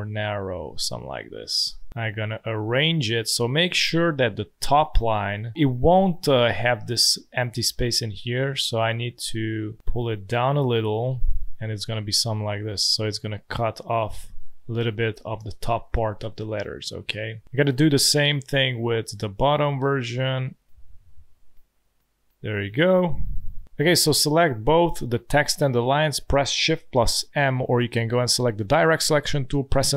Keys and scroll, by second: 8.1 space, 9.1 space, 12.2 space, 15.2 space, 15.9 space, 18.7 space, 19.6 space, 23.6 space, 27.0 shift+m.